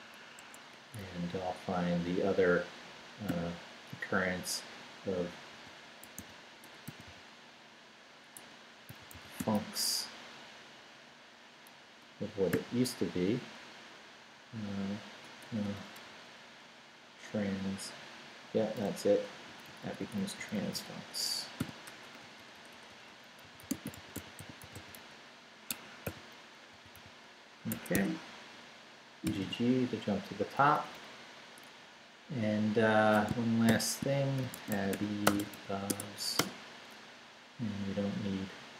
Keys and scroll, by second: 0.4 Escape, 3.3 /, 5.5-9.9 typing, 11.9 \, 12.5 ., 15.4 BackSpace, 16.0 t, 18.8 Return, 19.5 Right, 21.6 i, 21.9 BackSpace, 23.2-26.0 typing, 25.7 Escape, 27.7 Escape, 29.2 g, 29.5 g, 30.4 Down, 31.9 Down, 33.7-36.0 typing, 36.4 Return, 37.2 Down.